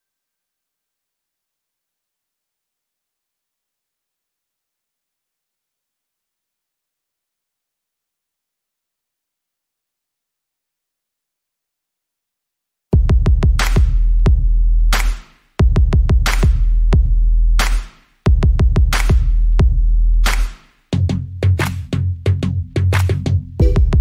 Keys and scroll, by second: 0.7 ctrl+g, 3.3 c, 5.9 e, 6.3 s, 8.4 Return, 16.7 Return, 21.0 Down, 21.7 Down, 21.9 Down, 23.4 Up.